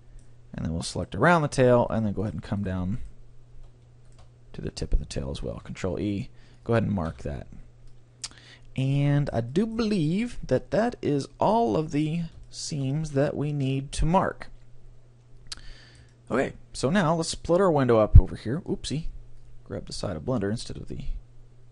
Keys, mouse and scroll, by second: 1.0-5.9 right drag, 5.5 ctrl+e, 7.1 a, 7.5-8.5 middle drag, 10.7-11.9 middle drag, 12.5 middle click, 12.9 middle click, 13.3-14.9 middle drag, 16.1-17.9 middle drag.